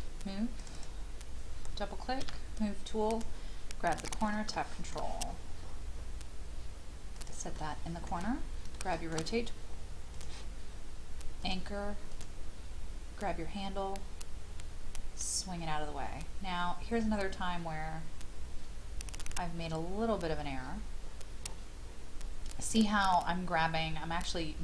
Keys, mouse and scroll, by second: 0.6-1.8 drag, 2.2 m, 3.1 click, 4.5 shift+middle click, 5.2 scroll up 1, 7.2 click, 7.5 middle click, 8.4 scroll down 1, 8.7 shift+middle click, 10.1 click, 20.6-23.4 scroll up 1.